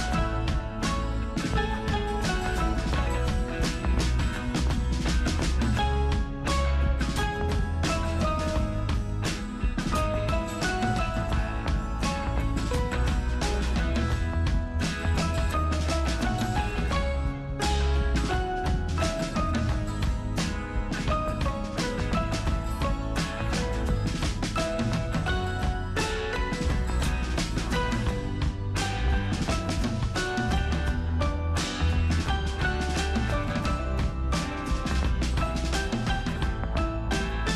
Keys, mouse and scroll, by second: 2.4 super+Return, 2.4 alt+super+scroll down 1, 4.8 super+click, 6.3 alt+super+scroll down 1, 7.7 alt+super+scroll up 1, 10.4 super+F9, 11.5 alt+super+scroll up 1, 12.9 alt+super+scroll down 1, 15.1 alt+super+Num_Lock, 15.1 alt+super+scroll down 1, 15.3 alt+super+scroll up 1, 15.7 alt+super+scroll down 1, 18.0 super+k, 20.6 super+click, 22.5 super+b, 24.3 super+right click, 26.4 super+click, 27.1 super+], 29.8 alt+super+Num_Lock, 29.8 alt+super+scroll up 1, 32.1 alt+super+click, 34.8 super+click.